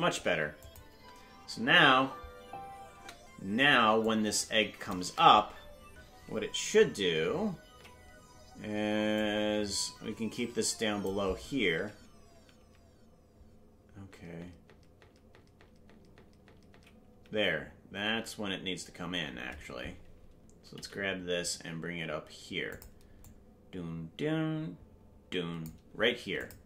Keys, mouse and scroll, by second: 0.6 click, 0.9 space, 4.0 click, 7.8 Left, 9.1-11.1 drag, 11.8 Left, 12.3 Right, 14.1-16.7 Left, 17.1 Right, 19.4 scroll up 1, 20.7-21.6 scroll up 11, 20.7 g, 23.2-25.6 drag, 26.4 click.